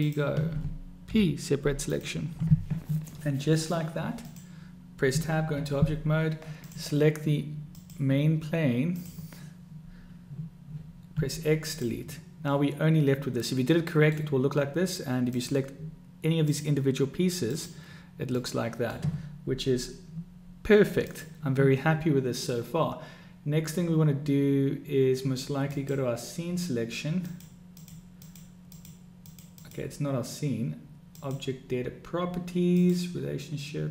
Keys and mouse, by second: 1.2 p, 5.1 Tab, 7.8 click, 8.9 click, 11.1 x, 12.6-14.2 middle drag, 15.3 click, 16.4 click, 17.4 click, 18.5-18.9 middle drag, 21.0-25.9 drag, 27.2 click, 27.6-28.0 drag, 28.2 click, 28.6 click, 29.2 click, 29.6-30.3 drag, 31.0 click, 32.6 click.